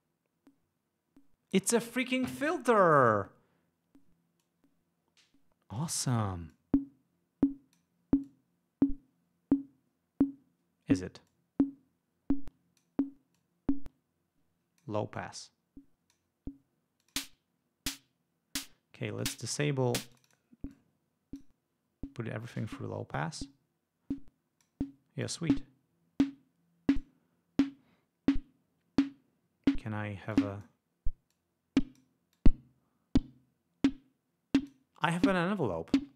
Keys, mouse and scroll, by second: 4.5 click, 6.6-8.1 drag, 8.3-11.3 drag, 11.4-13.1 drag, 13.5-15.1 drag, 15.3-16.4 drag, 17.1 click, 19.3 click, 20.2 click, 20.8-21.7 drag, 23.5-24.9 drag, 25.3-27.3 drag, 30.4-30.9 drag, 31.4-32.3 drag, 32.5 click.